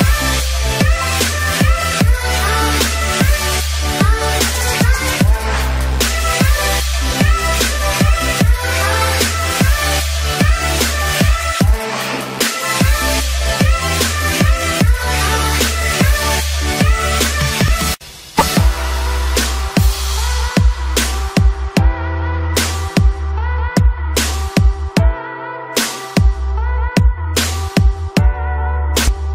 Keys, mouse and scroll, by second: 0.1 ctrl+click, 1.5-2.5 typing, 3.0 click, 4.5 ctrl+z, 5.8 click, 8.1 ctrl+z, 8.8 click, 11.0 click, 16.6 right click, 17.0-29.3 drag.